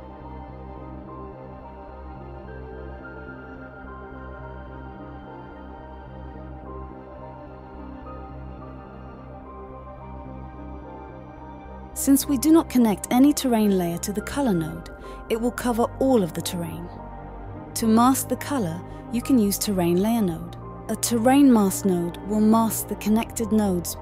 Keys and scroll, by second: 1.7-2.4 typing, 3.5-4.9 typing, 20.5-21.4 typing, 23.9-24.0 typing.